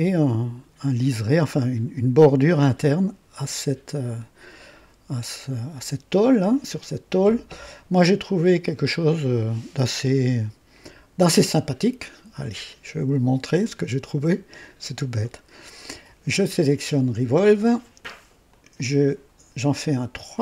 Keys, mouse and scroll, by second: 18.4 click, 20.3 click.